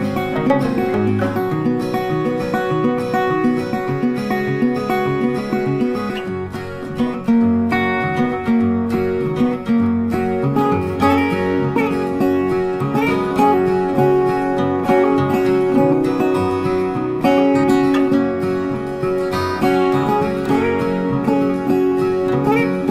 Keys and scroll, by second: 5.3 ctrl+8, 13.4 ctrl+z, 15.4 ctrl+g, 20.0 ctrl+8.